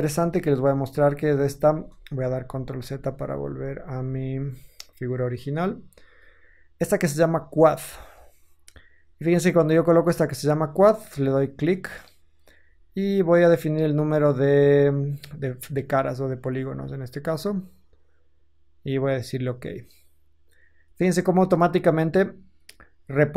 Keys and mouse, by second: 0.0 ctrl+z, 0.0 ctrl+middle click, 0.1 ctrl+z, 0.3 ctrl+z, 0.9 ctrl+z, 2.4 ctrl+z, 2.8 ctrl+z, 3.3 ctrl+z, 3.5 ctrl+z, 5.9 shift+middle drag, 7.7 middle click, 7.9 click, 8.0-11.3 middle drag, 11.3-23.3 drag.